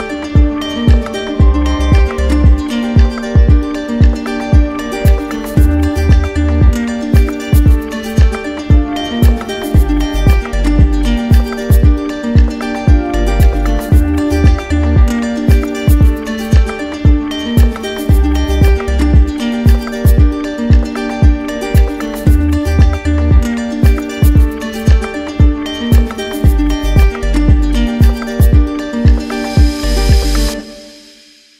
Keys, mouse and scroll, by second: 0.2 right click, 1.5 d, 2.5 right click, 3.4 click, 4.1 d, 5.0 shift+click, 6.3 shift+click, 7.0 d, 8.0 shift+click, 8.5 shift+click, 9.0 shift+click, 9.3 shift+click, 9.6 shift+click, 10.0 shift+click, 10.3 shift+click, 10.6 shift+click, 10.9 shift+click, 11.1 shift+click, 11.2 shift+click, 11.4 shift+click, 12.2 shift+click, 12.7 shift+click, 13.1 shift+click, 13.8 shift+click, 14.2 shift+click, 14.4 shift+click, 14.7 shift+click, 15.0 shift+click, 15.3 shift+click, 15.9 shift+click, 16.0 shift+click, 17.1 right click, 18.0 right click, 18.1 z, 19.6 click, 20.6 right click, 23.1 click, 24.9 click, 25.6 ctrl+z, 27.5 click, 31.0 shift+click.